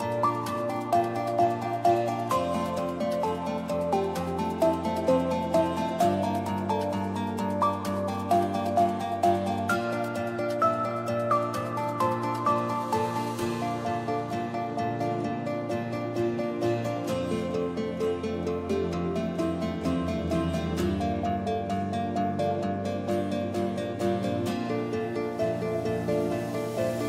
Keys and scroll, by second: 3.1 c, 5.9 u, 13.4 u, 13.5 space, 14.4 s.